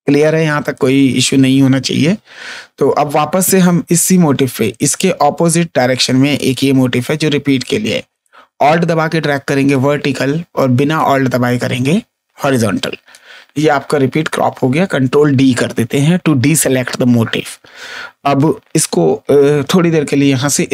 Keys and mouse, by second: 0.4 space, 0.6 click, 6.3 click, 8.2 click, 10.9 click, 14.2 ctrl+d.